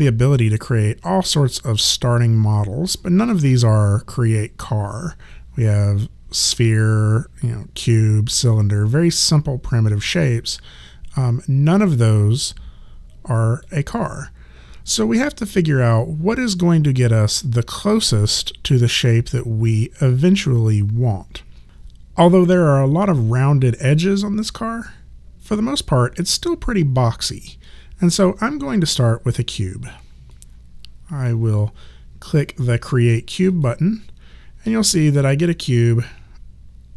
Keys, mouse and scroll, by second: 12.4 click, 30.3 click, 33.5 click.